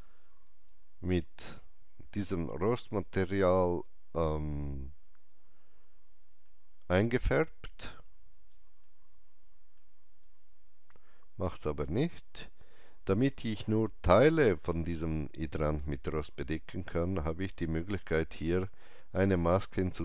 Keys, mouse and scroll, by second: 0.4-4.5 drag, 0.4 scroll down 1, 0.6 alt+right click, 6.4 middle click, 6.4 alt+right click, 6.4-7.9 drag, 7.9-14.4 alt+drag, 17.1-20.0 alt+drag, 17.1 alt+middle click, 18.2 right click.